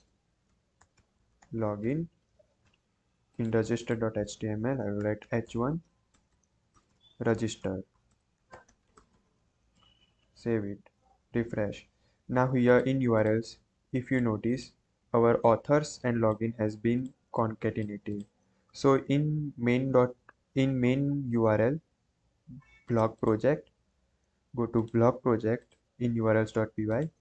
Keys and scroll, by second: 0.0-1.8 typing, 4.7-9.4 typing.